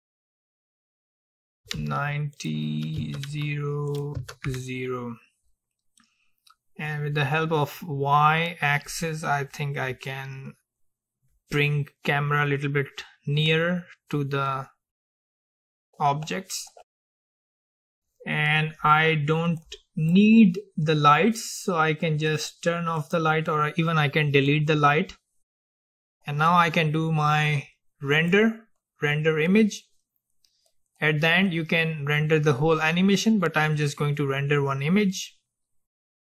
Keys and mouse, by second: 0.3-6.0 drag, 7.0-9.0 drag, 19.7-21.7 drag, 22.4-25.0 drag, 28.2-32.2 drag.